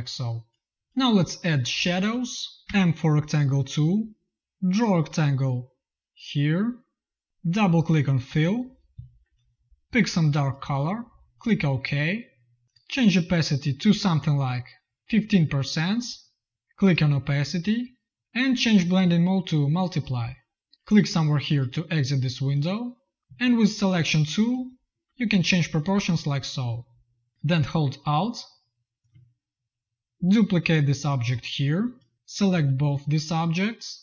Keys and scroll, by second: 0.7 z, 1.6 v, 2.5 m, 23.2 z, 23.8 v, 32.1 v.